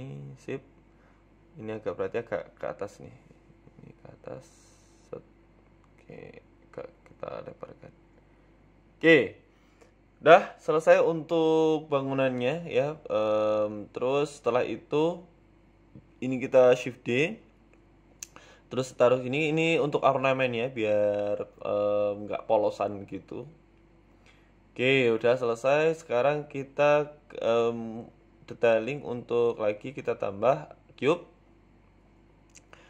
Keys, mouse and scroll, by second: 2.1 click, 3.3-4.9 typing, 6.8 scroll up 2, 7.0 s, 8.5 scroll down 2, 8.8 Tab, 9.2 g, 11.2 shift+middle click, 12.1-12.6 scroll up 3, 12.4 shift+middle click, 12.6 scroll down 3, 12.8 shift+middle click, 13.2 Tab, 13.6-14.1 scroll up 1, 14.1 shift+d, 14.7 z, 15.5 z, 16.2 shift+middle click, 16.8 s, 19.0-19.4 scroll up 2, 19.3 shift+middle click, 19.7 g, 20.9 s, 22.3 KP_7, 23.1 s, 25.1 Tab, 25.3 middle click, 26.1 KP_1, 26.5 scroll down 2, 26.6 z, 27.4 shift+middle click, 28.2 scroll down 2, 28.5 shift+middle click, 31.1 shift+a.